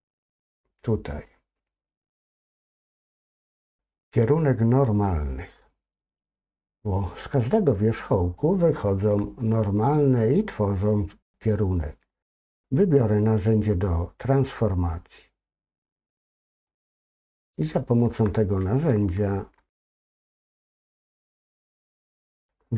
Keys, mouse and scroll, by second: 1.1-7.0 drag, 16.2 click, 17.8 scroll down 1, 18.1 middle click, 19.0 shift+scroll up 2, 19.1 shift+middle click, 19.8 middle click, 21.0-22.7 scroll up 2.